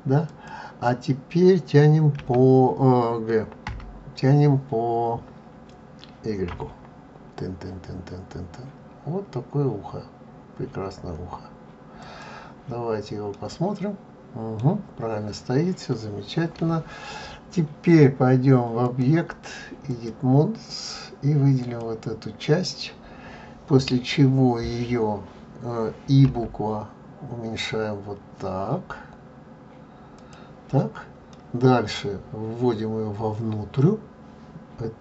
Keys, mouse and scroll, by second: 13.4 middle click, 15.2-15.7 scroll, 15.7-18.1 scroll down 1, 18.9 click, 21.7 click, 31.4 middle click.